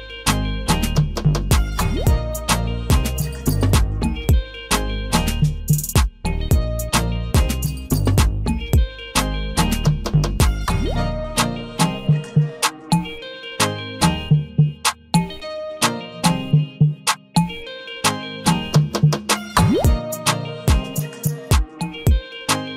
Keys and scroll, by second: 3.8 ctrl+d.